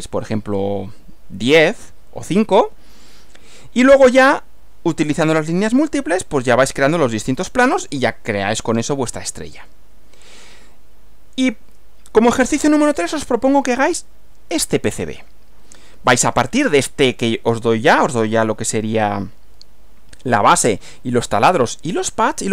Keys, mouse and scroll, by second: 7.8 click, 9.5 Right, 16.1 Right.